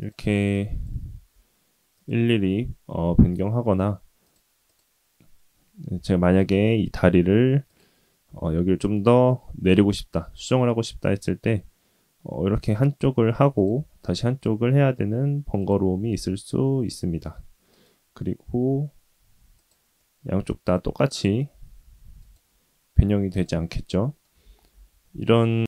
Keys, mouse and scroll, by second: 0.5 click, 1.0 g, 3.4-3.9 middle drag, 4.2 click, 4.6 middle click, 5.3 shift+middle click, 5.9 middle click, 6.9 click, 7.7 middle click, 8.5 shift+middle click, 9.5 g, 12.6 Tab, 12.8 click, 13.1 Tab, 13.7 middle click, 14.8 click, 15.2 g, 17.8 g, 19.2 middle click, 20.3 middle click, 20.7 g, 22.6 click, 23.1 middle click, 23.7 ctrl+z, 24.0 ctrl+z, 24.4 ctrl+z, 24.7-25.3 middle drag, 25.3 scroll down 1.